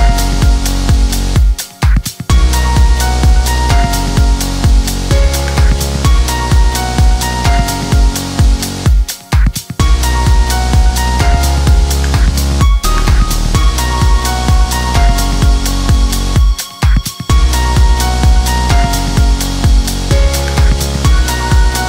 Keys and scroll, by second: 7.4 Escape, 16.4 Escape, 21.6 Escape.